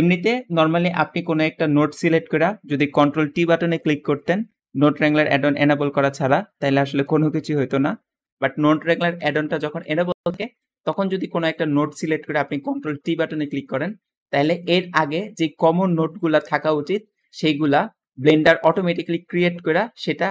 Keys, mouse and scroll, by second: 11.5 click, 11.8 g, 12.3 click, 13.2-14.1 scroll down 2, 19.5 click, 20.2-20.3 drag.